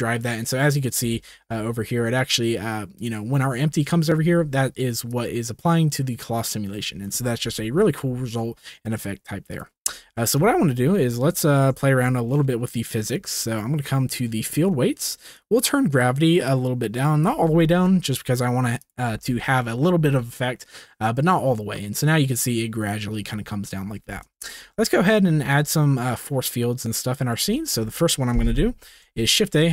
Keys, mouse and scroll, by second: 1.1 space, 2.1-3.0 drag, 5.1-7.0 drag, 10.1 shift+middle drag, 10.7 ctrl+s, 11.5 shift+middle click, 15.3-17.2 drag, 17.7 ctrl+s, 18.8 drag, 19.2 space, 24.1 space, 24.6 ctrl+s, 25.0-25.5 shift+middle drag, 26.8 click, 27.3-28.3 middle drag, 28.8 shift+a.